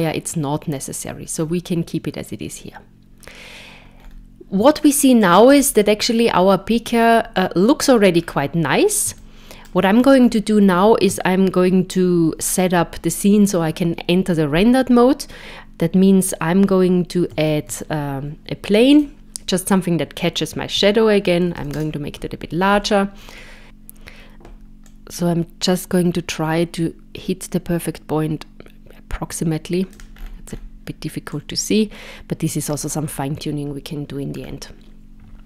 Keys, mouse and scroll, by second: 4.0-4.6 scroll up 3, 4.8 shift+middle click, 5.6-7.1 scroll up 2, 8.1-8.8 scroll down 4, 9.2 shift+middle click, 10.2-11.1 scroll down 2, 17.3 shift+a, 20.7 s, 22.6 scroll down 4, 23.6 click, 24.9 click, 30.2-30.7 scroll up 7, 31.4 click, 34.4 scroll down 2.